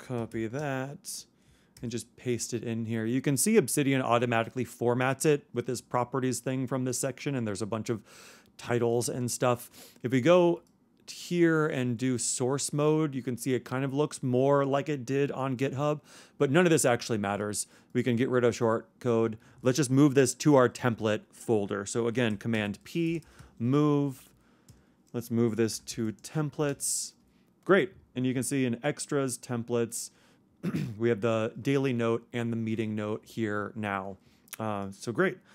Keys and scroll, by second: 0.2 super+o, 1.5 super+Return, 1.7 super+v, 22.5 super+p, 23.0 super+m.